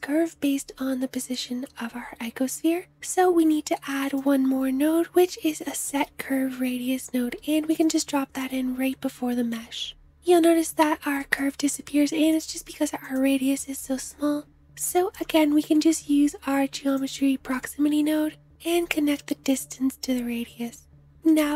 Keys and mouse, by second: 2.3-9.3 shift+drag, 2.7 shift+a, 10.2-11.6 drag, 21.2 space.